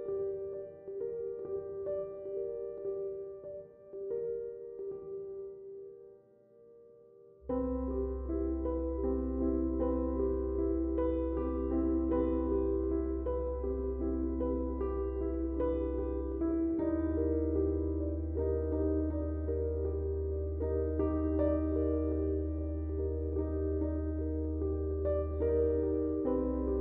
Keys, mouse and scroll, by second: 2.2 space, 2.4 click, 3.2 space, 3.4-5.7 ctrl+drag, 12.3-23.6 drag, 12.3 typing, 23.6 click.